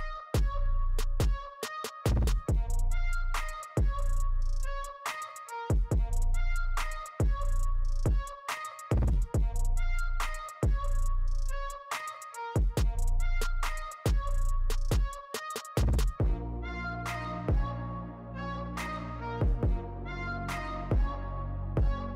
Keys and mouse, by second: 2.2 right click, 2.5 right click, 3.8 right click, 5.8 right click, 6.1 right click, 8.9 right click, 12.4 right click, 15.2 right click, 18.3 right click, 20.8 right click.